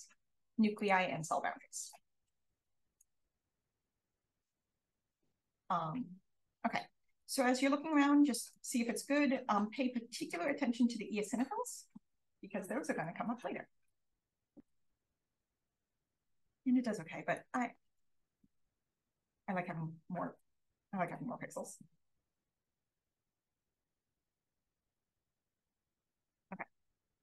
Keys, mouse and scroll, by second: 0.7 click, 0.7-1.7 scroll up 1, 1.7 click, 1.7-2.6 scroll up 1, 2.6 click, 3.2-4.4 scroll down 1, 4.4-4.9 drag, 4.4-6.0 scroll down 1, 6.0-6.3 drag, 6.0-7.2 scroll up 1, 6.7-7.8 drag, 8.1-9.2 drag, 10.1 click, 12.9 click, 17.3 click, 20.7 click, 22.1 click, 25.2-26.1 scroll up 1, 26.1-27.2 scroll up 1.